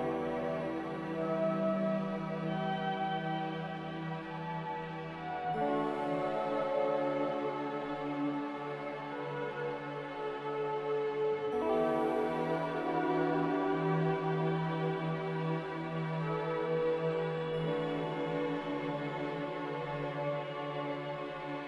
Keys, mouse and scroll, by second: 0.7 Delete, 2.5 Delete, 3.3 c, 6.6 click, 9.0 click, 9.2 n, 14.6 ctrl+z.